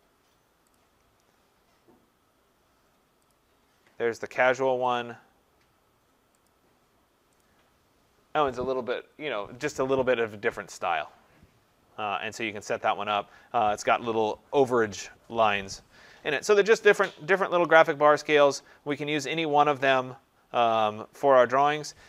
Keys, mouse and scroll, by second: 0.8 click, 3.3 click, 5.0 click, 6.5 click, 7.4 click, 18.9 click.